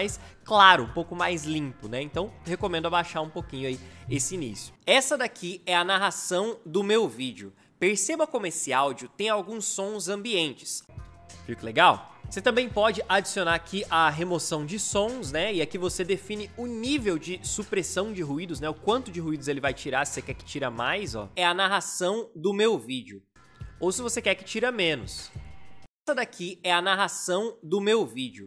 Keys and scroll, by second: 4.7 space, 10.8 space, 21.3 space, 25.8 space.